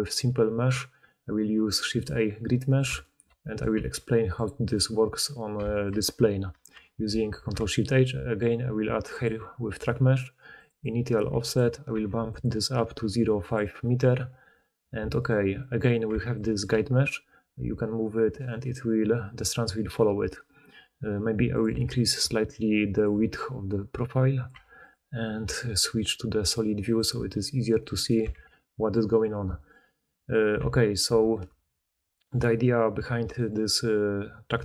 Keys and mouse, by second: 2.0-4.0 middle drag, 3.7 g, 4.3-7.3 middle drag, 7.0 ctrl+shift+h, 7.3-13.9 ctrl+shift+drag, 13.9-14.7 middle drag, 15.1 click, 15.5-19.2 middle drag, 16.6 g, 19.2 click, 19.2-21.5 middle drag, 21.5-24.8 drag, 24.8-26.8 middle drag, 26.8 click, 26.9-27.6 middle drag, 27.6 click, 27.7-29.5 middle drag, 28.2 alt+q, 29.5 click, 29.6-30.5 middle drag, 30.5 Tab, 31.0 Tab, 31.4 Tab, 32.1-34.6 middle drag.